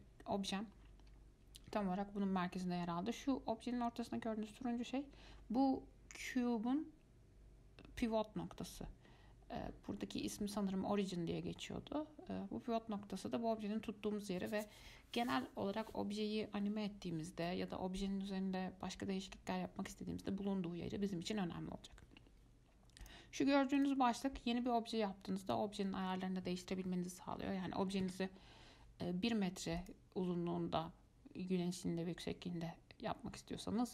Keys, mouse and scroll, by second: 3.0-3.3 scroll up 2, 23.2-24.2 drag, 25.6-28.6 drag, 30.0-33.0 drag.